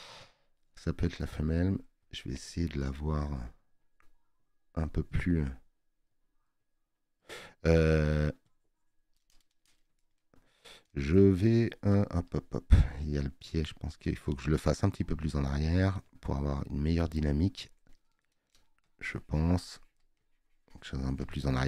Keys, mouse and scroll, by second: 13.6 right click.